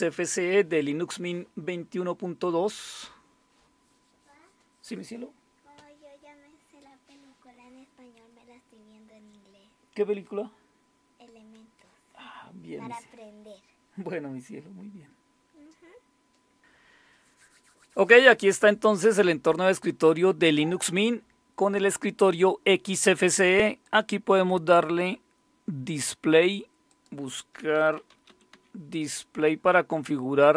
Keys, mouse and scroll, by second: 23.8 click, 26.9 click, 27.5-29.0 typing.